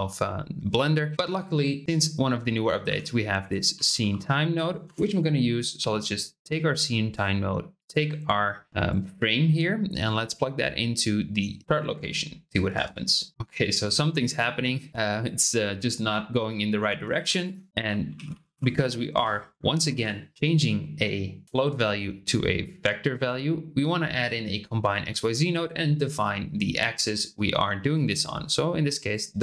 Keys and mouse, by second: 2.3 shift+middle click, 2.8 shift+a, 7.8-8.7 drag, 9.1-11.6 drag, 12.7 space, 14.9 click, 14.9 space, 17.1 shift+a, 27.9-29.2 drag.